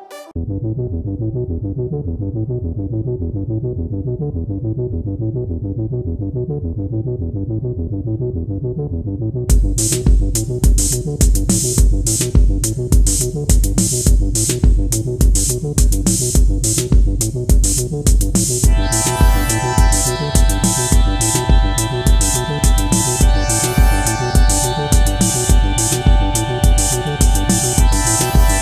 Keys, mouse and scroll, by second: 0.0-2.5 typing, 7.2 typing, 14.5-16.2 scroll down 1, 16.2-18.0 scroll up 1, 19.3 alt+click, 23.5-24.2 typing.